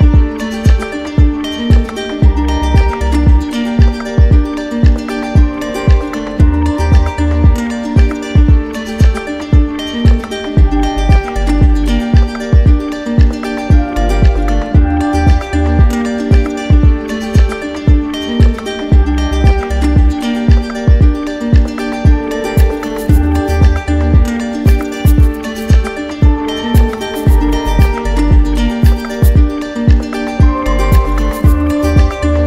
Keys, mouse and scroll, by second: 1.6 w, 5.5 ctrl+click, 5.8 ctrl+z, 6.7 ctrl+click, 9.1 click, 9.6-10.8 shift+drag, 19.8-20.8 drag, 24.8-25.9 drag, 26.9 ctrl+click, 28.4 ctrl+click, 29.0 alt+click.